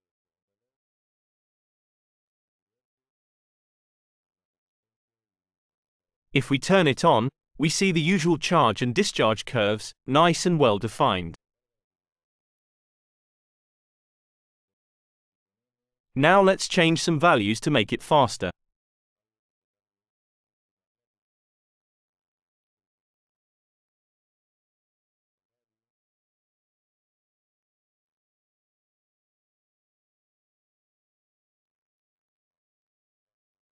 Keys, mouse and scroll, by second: 0.9 click, 3.1 click, 7.9 click, 16.3 click, 16.9 click, 18.6 click, 21.5 BackSpace, 22.6 Return, 24.8 click, 25.6 click, 27.3-29.3 drag, 29.4-30.4 drag, 30.7 click, 32.7 click.